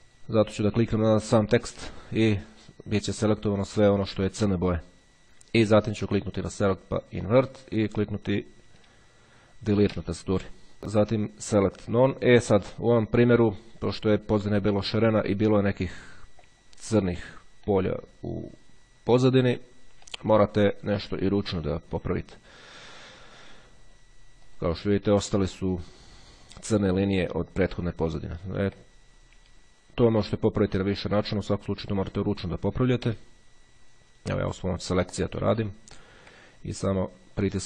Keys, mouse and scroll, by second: 2.1 click, 6.5 click, 7.5 click, 9.9 Delete, 11.2 click, 12.5 click, 16.1 click, 16.7-17.9 ctrl+scroll up 3, 17.9-19.9 drag, 20.3 click, 21.9 click, 24.7 click, 28.5-28.9 ctrl+scroll down 1, 29.5-30.0 scroll down 1, 31.2 click, 32.9 Delete, 35.7-36.3 ctrl+scroll up 2, 36.3-36.8 ctrl+scroll up 1.